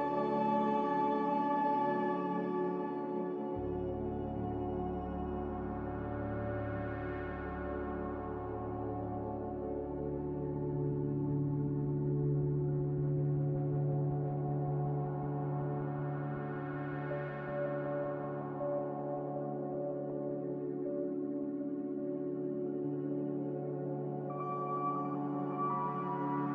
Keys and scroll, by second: 0.0 q, 16.4 s, 20.9 f, 25.9 Escape, 26.0 Escape, 26.2 Escape.